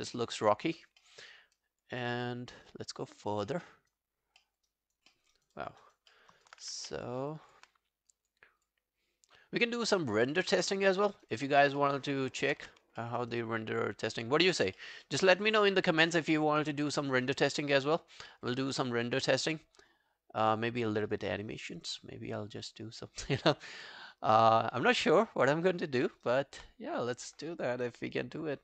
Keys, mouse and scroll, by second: 0.1 alt+right click, 0.3 alt+click, 0.7 alt+right click, 1.0 alt+middle click, 1.4 alt+scroll down 1, 1.6 alt+click, 2.1 alt+middle click, 2.5 alt+click, 3.4 alt+click, 3.5 alt+middle click, 3.7 alt+right click, 4.4 alt+middle click, 4.7 alt+right click, 5.1 alt+middle click, 5.4 alt+right click, 5.6 alt+click, 5.8 alt+right click, 6.1 alt+middle click, 6.4 alt+right click, 6.8 alt+right click, 7.3 alt+click, 8.6 double click, 9.4-9.9 scroll down 11, 9.9 alt+click, 10.9 alt+middle click, 11.2 alt+right click, 11.4 alt+click, 11.8 alt+middle click, 12.1 alt+scroll down 2, 12.3 alt+click, 12.6 q, 13.0 alt+middle click, 13.2 alt+right click, 13.4 alt+click, 14.8 alt+middle click, 15.1 alt+right click, 17.0 alt+middle click, 17.2 alt+right click, 17.5 alt+click, 17.8 alt+middle click, 18.0 alt+right click, 18.3 alt+middle click, 18.5 alt+right click, 19.4 scroll down 1, 26.0 alt+middle click, 26.3 alt+right click.